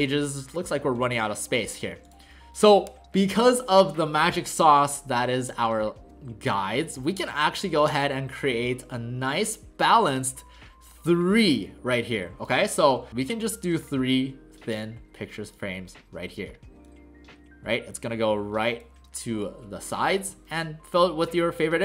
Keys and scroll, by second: 4.9 space, 7.3 alt+space.